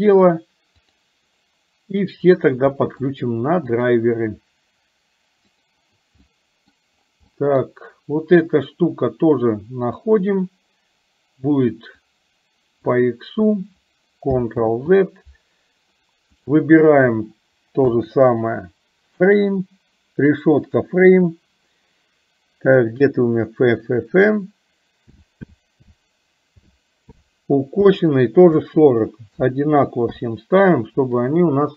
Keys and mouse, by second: 0.9 click, 2.9 middle click, 3.7 click, 6.2 middle click, 7.4 middle click, 9.9 click, 12.0 click, 14.7 ctrl+z, 16.4-30.2 drag.